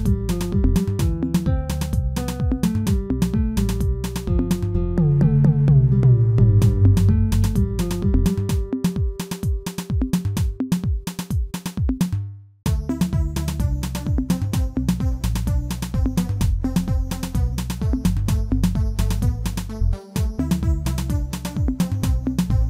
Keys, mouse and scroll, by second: 4.1 click, 4.4-5.2 scroll down 4, 5.2-5.9 middle drag, 5.9 scroll up 1, 6.1 scroll down 1, 6.3-6.8 shift+middle drag, 6.8-7.3 scroll down 3, 7.3-10.9 middle drag, 10.9-12.2 drag, 12.2 h, 12.5 click, 12.9 Tab, 13.0-14.0 scroll up 2, 14.0-15.4 shift+middle drag, 15.4 KP_1, 16.2 click, 17.2 2, 18.9-19.7 scroll up 2, 19.7 alt+click, 20.4 x, 22.1 ctrl+z.